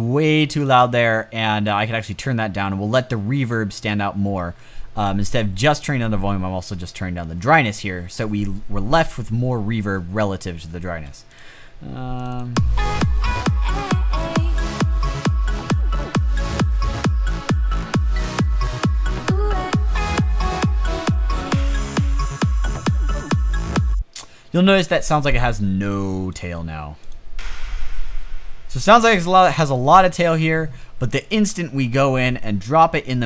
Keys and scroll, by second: 29.4 space.